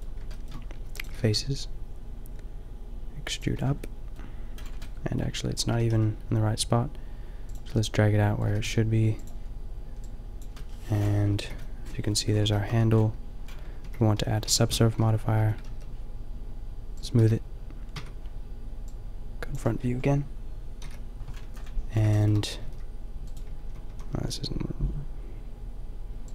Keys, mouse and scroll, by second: 0.9 e, 1.2 g, 3.4-4.1 drag, 3.6 Tab, 4.3 click, 4.6-5.0 drag, 5.0-5.7 middle drag, 5.7 g, 7.5 click, 8.5 g, 8.6 middle click, 10.9-11.8 middle drag, 11.5 KP_5, 12.0 middle click, 12.2 middle click, 12.9 Tab, 13.8 ctrl+2, 14.4 Tab, 15.4 Tab, 15.7 t, 17.3 t, 18.0 Tab, 19.5 Tab, 19.5 t, 20.8 KP_5, 22.2 middle click, 22.6 g, 23.3 middle click, 23.4 a, 23.9 a, 24.1 g.